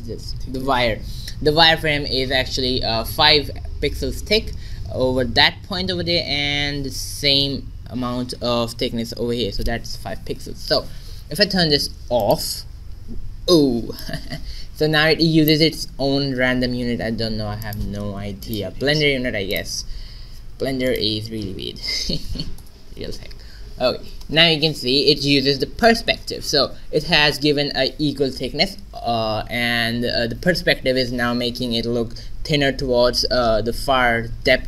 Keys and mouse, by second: 12.2-15.6 drag, 17.6-22.6 drag.